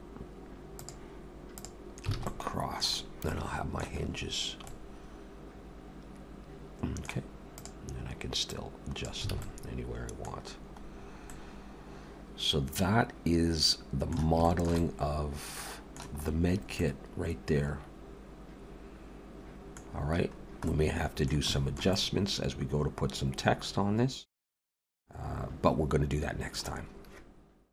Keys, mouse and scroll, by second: 0.8 click, 2.1 alt+a, 2.3 middle click, 3.0 scroll down 3, 3.2 middle click, 4.0-4.4 scroll up 2, 4.7 middle click, 4.7 scroll up 1, 7.5 click, 8.5 click, 9.3 alt+a, 9.4 middle click, 10.4-11.3 scroll down 4, 11.3 middle click, 14.5 shift+middle click, 14.8 middle click, 16.2-17.3 scroll up 6, 16.8 middle click, 19.9 scroll down 2, 20.7 middle click, 20.7 scroll down 2, 21.5 shift+middle click, 21.9 middle click.